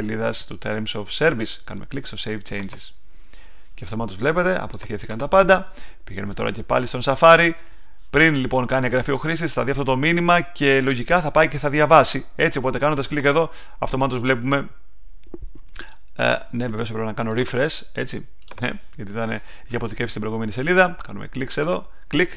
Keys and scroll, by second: 6.0 super+Tab.